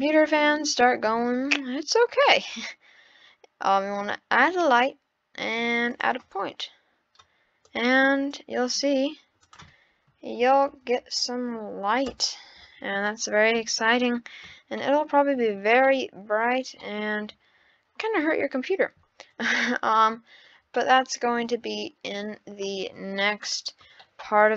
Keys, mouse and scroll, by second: 0.0 scroll up 4, 1.0 shift+a, 7.6 click, 9.4-10.7 drag, 10.7 d, 10.9 o, 13.0 scroll up 1, 13.1-14.1 middle drag, 14.3-14.6 scroll up 4, 14.8-19.3 shift+middle drag, 19.3-20.1 scroll down 1, 20.1 scroll down 1, 20.8-21.9 middle drag, 21.9-22.9 scroll down 2, 23.4-24.5 middle drag.